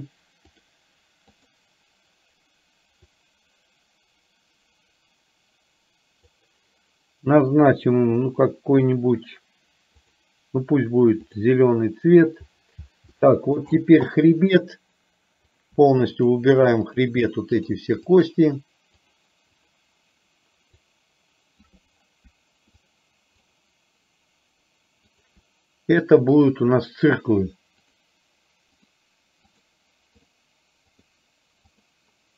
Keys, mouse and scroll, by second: 1.4 click, 3.0-6.8 drag, 13.3 shift+middle click, 17.5 shift+click, 18.2 shift+click, 19.2 shift+click, 19.7 shift+click, 20.9-21.8 shift+drag, 22.9-23.7 shift+drag, 26.5-28.0 drag, 28.9-29.8 drag, 30.4 click, 31.7-32.3 drag.